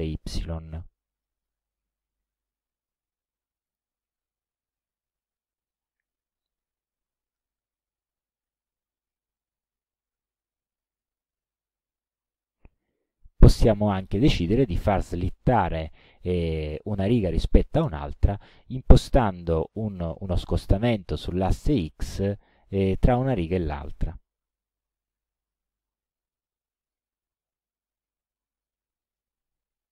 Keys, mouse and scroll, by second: 1.2 KP_2, 1.5 KP_5, 3.7 click, 17.9 click, 25.1 KP_7, 25.5 KP_5, 26.9 click, 28.4-29.4 middle drag.